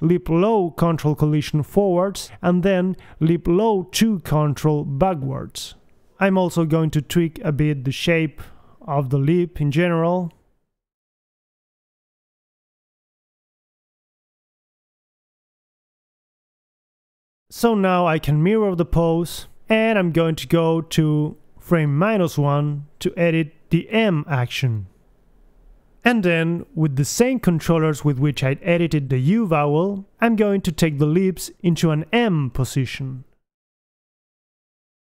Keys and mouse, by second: 0.2 right click, 4.3 middle click, 5.2 KP_3, 5.3 middle click, 6.5 KP_3, 6.8 g, 7.2 click, 7.8 click, 8.3-10.6 typing, 9.3 click, 9.7 click, 11.6 click, 11.6 g, 12.3 click, 12.5 middle click, 13.0 KP_1, 14.1 g, 14.8 click, 15.5 KP_1, 15.8 a, 16.1 b, 18.4-21.1 drag, 20.0 a, 22.1 KP_1, 23.3 Left, 24.3 a, 24.8 alt+g, 24.9 alt+r, 25.1 alt+s, 25.1 a, 25.7 Left, 26.4 click, 26.4 g, 28.3 Right, 28.7 Left, 29.1 KP_3, 30.6 Left, 30.8 Right, 30.9 Right, 31.3 click, 32.4 Right, 32.9 Left, 33.2 Left, 33.6 g.